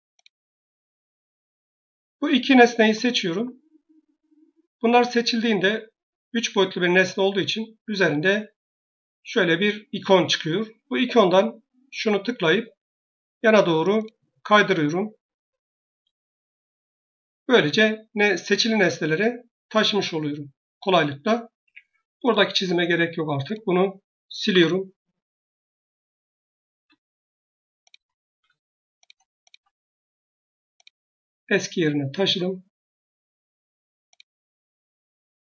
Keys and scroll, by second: 21.5 Escape, 24.3 Delete.